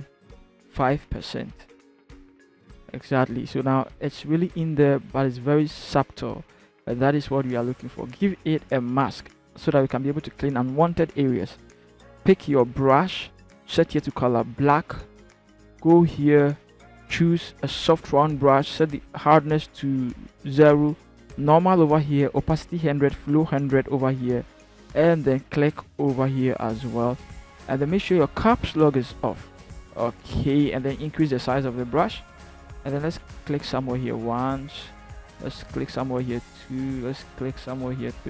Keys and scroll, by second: 0.6 c, 0.7 5, 1.1 Return, 28.5 Caps_Lock, 30.2 ], 30.6 ].